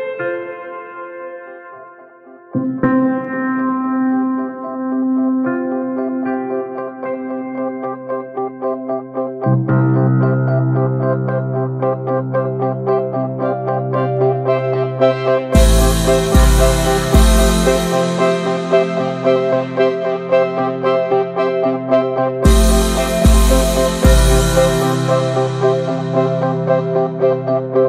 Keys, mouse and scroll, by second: 0.0-0.6 shift+middle drag, 0.6 3, 0.9 shift+middle click, 1.2 scroll up 1, 1.5 alt+z, 2.0 click, 2.2 shift+middle click, 2.4 alt+z, 2.6 middle click, 2.8 s, 3.6 shift+middle click, 4.3 e, 5.7-6.0 shift+middle drag, 6.0 scroll up 1, 6.2-6.9 shift+middle drag, 6.9 2, 7.1 click, 7.3-8.0 middle drag, 8.0 alt+shift+click, 8.5 ctrl+b, 9.3 Tab, 9.4 click, 9.5 click, 9.6 ctrl+a, 9.8 click, 9.9 scroll down 1, 10.1 click, 10.3 right click, 10.8 ctrl+a, 10.9 click, 11.1-11.6 middle drag, 11.6 Tab, 11.8 shift+middle click, 11.9 s, 13.1 a, 13.7 right click, 14.1 scroll down 2, 14.2-15.1 middle drag, 15.1 click, 15.3 middle click, 15.5 ctrl+s, 15.6 click, 15.8 shift+middle drag, 16.0 Tab, 16.5 /, 16.8-17.5 shift+middle drag, 17.5 ctrl+s, 17.9 click, 18.1 /, 18.4 middle click, 18.5 Tab, 18.8 shift+middle click, 19.6 Tab, 19.7 click, 19.9 ctrl+a, 20.1 Tab, 20.3 shift+middle click, 20.4 scroll up 1, 20.7-21.0 middle drag, 21.0 click, 21.2 alt+shift+click, 21.4 middle click, 22.1 alt+shift+click, 22.2-23.0 shift+middle drag, 23.0 alt+shift+click, 23.2-25.4 middle drag, 25.4 right click, 25.6 a, 25.8 a, 26.0-26.6 right drag, 26.6-27.7 middle drag, 27.7 2.